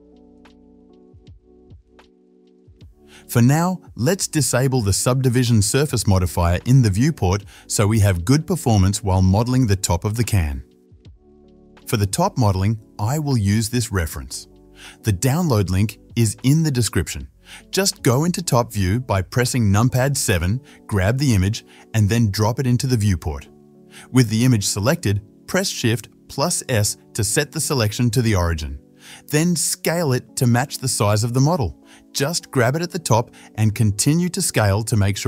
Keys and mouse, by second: 1.1-3.4 right drag, 3.4-4.6 drag, 4.6-11.7 right drag, 7.3 click, 7.3 middle click, 11.6 ctrl+s, 11.7-17.9 drag, 17.9-21.0 middle drag, 19.6 KP_7, 21.5-22.9 middle drag, 22.9 right click, 23.0-31.9 middle drag, 25.2 shift+s, 29.9 s, 32.7 g, 34.8 KP_7, 35.0 middle click.